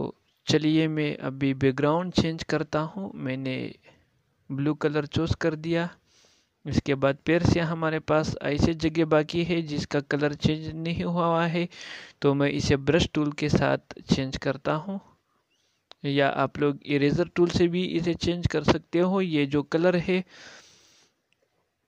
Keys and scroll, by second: 18.5 ctrl+m.